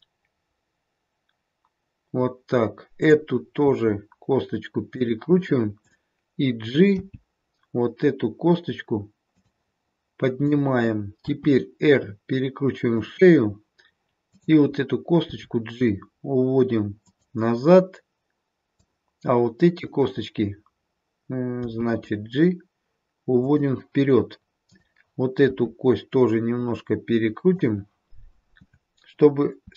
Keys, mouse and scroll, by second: 3.0 click, 3.7 r, 5.7 click, 6.9 g, 10.3 click, 11.2 r, 14.3 click, 15.3 g, 18.6 click, 21.7 g, 25.4 click, 25.4 r, 29.6 r.